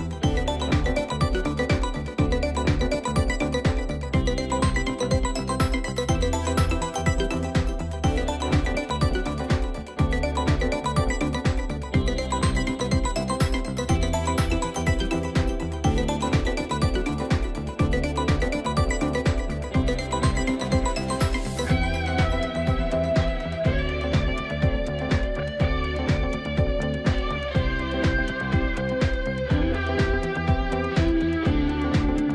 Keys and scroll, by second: 22.4 ctrl+z.